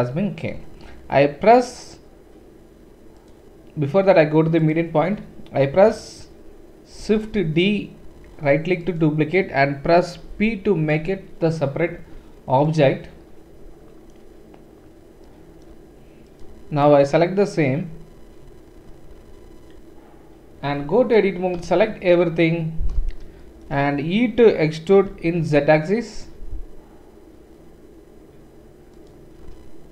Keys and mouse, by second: 3.2-14.0 drag, 7.1 shift+d, 10.3 p, 11.9 Tab, 14.0-17.0 middle drag, 17.0-19.7 drag, 19.7-29.9 middle drag, 20.7 Tab, 21.5 a, 25.1 e.